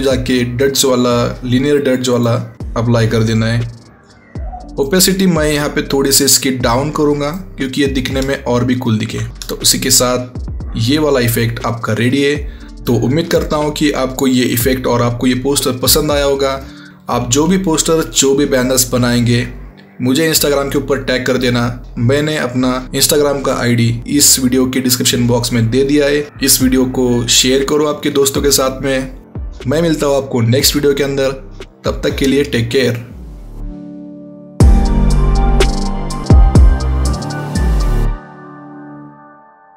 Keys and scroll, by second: 9.3 Tab.